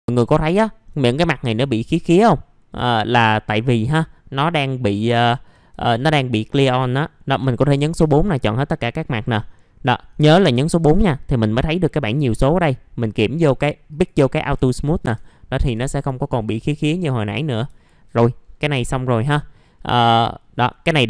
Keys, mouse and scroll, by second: 0.0 scroll down 1, 0.3 alt+middle click, 1.6 middle click, 1.8 F4, 2.8 alt+middle click, 5.7 alt+middle click, 9.1 click, 9.8-10.8 drag, 15.6 F4, 15.9 scroll down 1, 16.2 alt+middle click, 17.7 alt+middle click, 18.4 scroll up 1, 18.7 F4, 19.1-19.6 scroll up 1, 19.6 middle click, 20.2 alt+middle click, 20.9-21.0 scroll up 1.